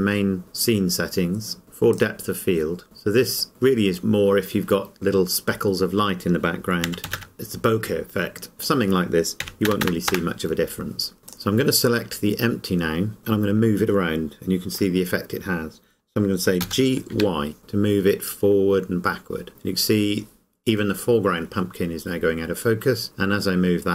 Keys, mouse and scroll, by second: 1.6-1.9 scroll up 1, 1.9 click, 3.4 click, 6.8 KP_2, 9.4 KP_1, 11.3 click, 16.7 g.